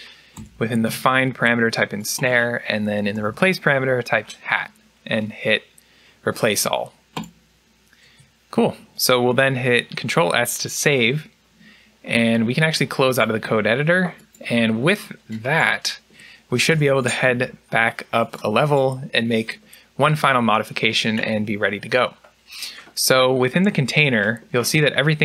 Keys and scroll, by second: 2.8-3.5 typing, 10.8 ctrl+s, 16.6 u.